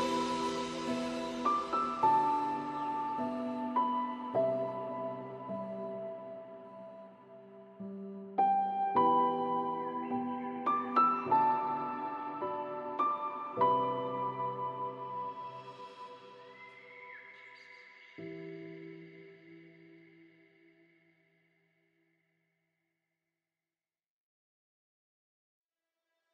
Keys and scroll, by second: 22.6 ctrl+z.